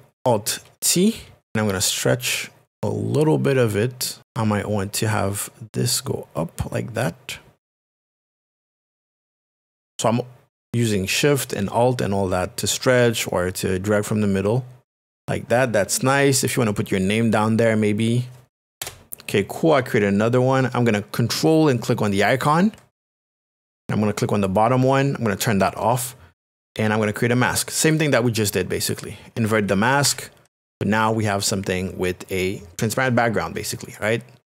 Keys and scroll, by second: 0.5 alt+t, 18.8 Return, 30.0 ctrl+i.